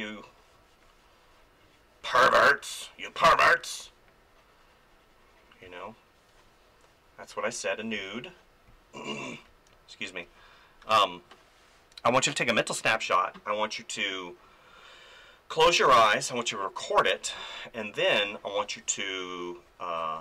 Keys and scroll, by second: 3.3 space, 5.6 space, 7.9 space, 17.3 space.